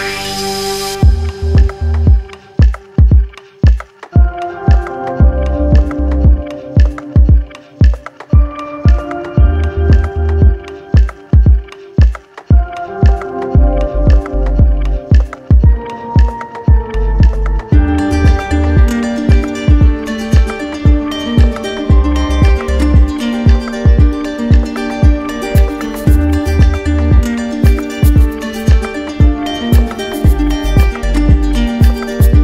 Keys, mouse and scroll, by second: 0.6 click, 2.7 click, 4.0 right click, 4.6 click, 5.6 click, 6.2 click, 6.9 click, 7.8 right click, 8.5 click, 8.9 click, 10.1 click, 10.4 shift+click, 11.2 alt+click, 12.4 click, 12.9 alt+click, 13.3 click, 13.9 click, 14.4 alt+click, 14.8 alt+click, 24.0 click, 32.0 click.